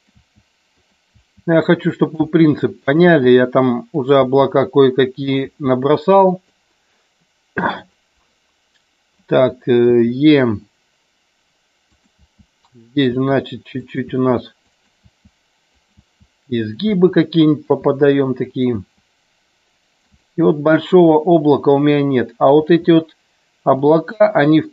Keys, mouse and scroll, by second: 0.0 click, 0.1 e, 0.7 click, 1.2 e, 2.3 e, 2.9 click, 3.2 e, 4.0 click, 4.3 e, 5.3 click, 5.5 e, 6.4 click, 10.0 e, 11.9 click, 12.3 e, 13.0 click, 13.4-18.9 typing, 13.9 click, 14.8 click, 15.8 click, 16.7 click, 17.6 click, 18.5 click, 20.2 click, 20.2 e, 20.8 click, 21.2 e, 22.7 click, 22.7 e, 23.9 click, 23.9 e, 24.6 click.